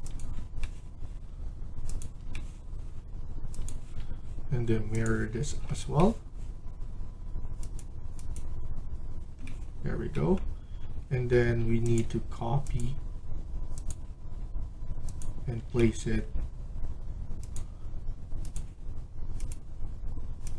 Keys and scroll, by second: 11.1 Escape, 11.3 Escape.